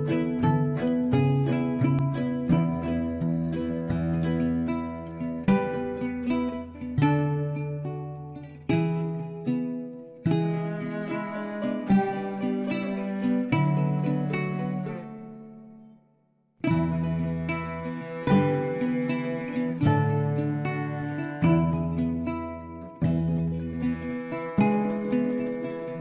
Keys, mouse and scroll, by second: 1.6 click, 1.9 scroll up 1, 2.2 Tab, 2.4 scroll down 2, 2.6-3.7 middle drag, 3.7-4.1 drag, 4.1-4.7 right drag, 4.7-8.3 middle drag, 8.3 click, 8.9-9.4 scroll down 1, 9.4 click, 9.9-11.0 middle drag, 11.0-11.6 scroll up 4, 11.6-12.3 shift+middle drag, 12.3-13.1 scroll up 2, 13.1-15.0 middle drag, 15.0 Tab, 17.5 KP_1, 18.8 shift+z, 19.2-20.6 scroll up 1, 20.9 click, 22.0-23.2 drag, 23.2 ctrl+z, 25.6-26.0 drag.